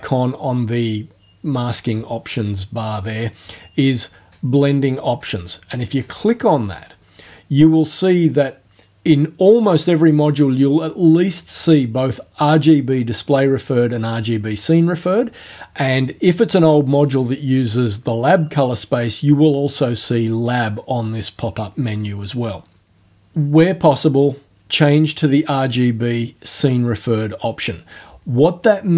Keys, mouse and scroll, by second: 6.0 click, 24.1 click.